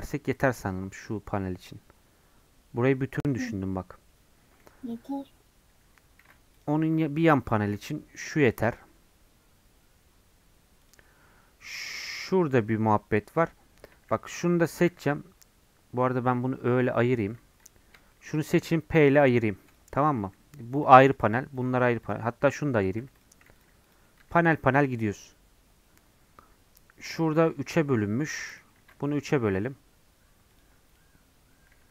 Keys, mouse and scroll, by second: 6.2 ctrl+r, 13.7-14.8 scroll up 1, 14.8 3, 16.6 /, 17.1 middle click, 17.3 scroll up 1, 17.7 click, 18.1-19.3 shift+middle drag, 19.3 p, 19.5 Tab, 19.7 click, 20.3 g, 21.1 click, 21.2 g, 22.1 click, 23.2 p, 24.2 Tab, 24.4-28.3 drag, 28.3 Tab, 28.8 ctrl+r, 31.7 3.